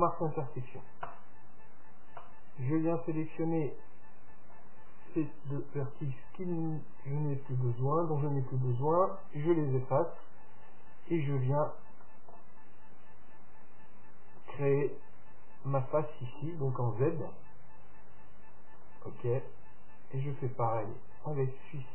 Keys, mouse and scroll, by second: 2.2-4.1 right drag, 2.8-4.7 middle drag, 4.5-6.5 right drag, 6.6 x, 10.3-13.9 middle drag, 14.3-16.1 drag.